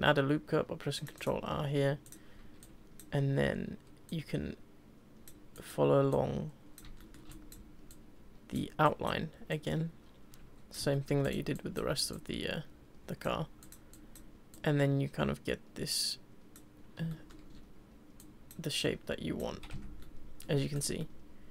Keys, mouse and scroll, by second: 2.0 click, 2.6 click, 4.1 click, 5.5 click, 6.1 click, 7.0 shift+middle click, 7.3 click, 7.9 Left, 8.8 click, 9.5 click, 10.9 shift+middle click, 11.2 click, 11.5 click, 12.1 click, 13.6 click, 13.9 click, 14.5 click, 17.3 middle click, 18.2 click, 18.8 click, 19.5 z, 19.7 Tab, 20.0-20.5 middle drag, 20.5 scroll down 3, 20.7 click, 21.0-21.5 middle drag.